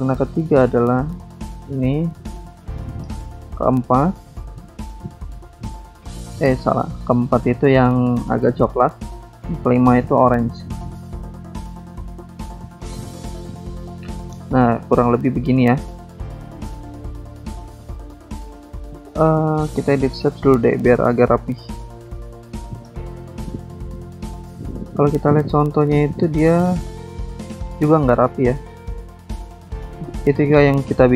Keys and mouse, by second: 0.8 click, 1.5 click, 2.5 click, 3.4 click, 4.5 click, 5.3 click, 7.1 click, 8.1 click, 9.2 click, 10.0 click, 11.3 click, 11.7 click, 11.7 double click, 12.7 double click, 13.3 double click, 14.7 click, 15.7 click, 16.6 click, 16.7 double click, 18.0 double click, 19.0 click, 19.7 click, 20.2 click, 20.3 double click, 20.3 click, 21.0 double click, 22.9 ctrl+click, 26.5 click, 27.4 click, 29.2 click, 30.5 click.